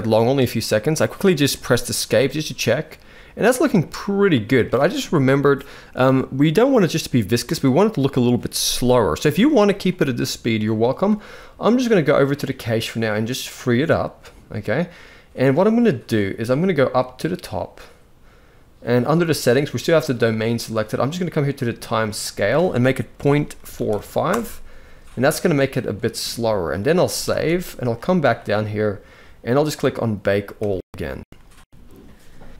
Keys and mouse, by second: 1.7 space, 3.4 space, 3.6-4.3 middle drag, 13.2 click, 21.9-24.0 drag, 26.8 ctrl+s, 27.0 ctrl+s, 30.2-32.5 drag.